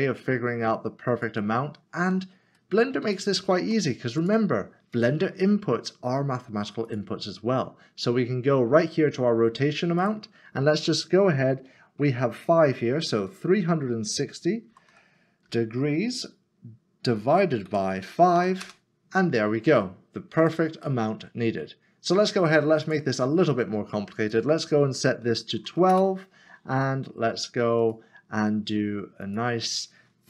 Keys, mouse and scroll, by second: 1.1 click, 2.6 middle click, 4.2 click, 10.0 click, 14.9-15.5 typing, 17.7-18.3 typing, 18.6 Return, 20.8 click, 21.0 middle click, 23.0 click, 25.4 typing, 25.9 Return, 28.0 click.